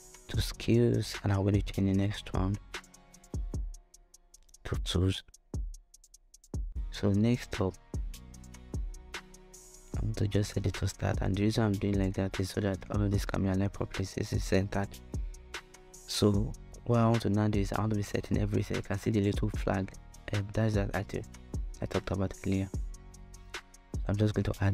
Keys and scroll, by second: 2.7-4.0 typing, 4.4 Return.